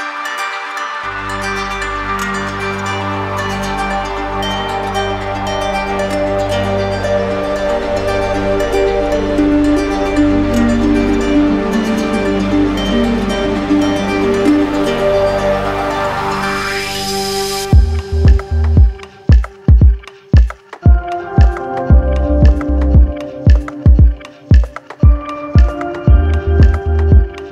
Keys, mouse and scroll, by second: 1.6 alt+click, 3.4 alt+click, 3.9 d, 4.5 d, 5.1 d, 6.1 right click, 7.1 click, 8.3 shift+click, 9.1 shift+click, 10.2 shift+click, 10.9 shift+click, 12.2 d, 14.0 shift+click, 15.3 shift+click, 16.3 shift+click, 17.1 shift+click, 18.1 shift+click, 18.9 d, 20.0 shift+click, 20.9 shift+click, 24.9 shift+click, 26.4 right click.